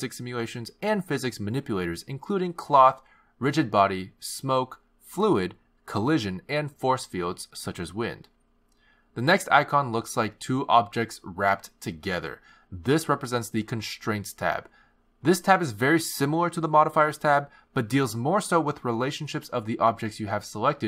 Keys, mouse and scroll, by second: 10.8 click, 13.7 click, 16.2 click, 18.3 click.